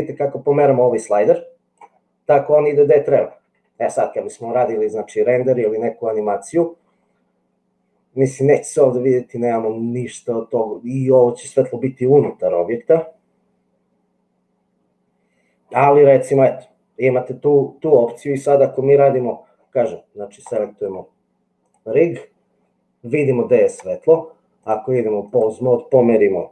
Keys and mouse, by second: 3.6 shift+middle click, 20.3 click, 21.6-22.6 drag, 24.6-25.6 drag.